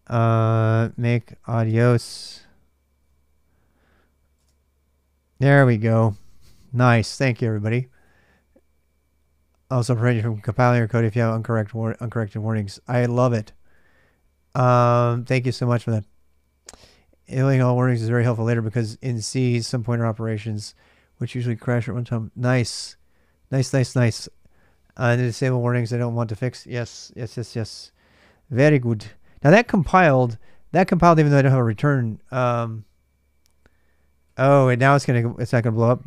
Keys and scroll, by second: 0.0-4.1 typing, 33.5-34.7 typing.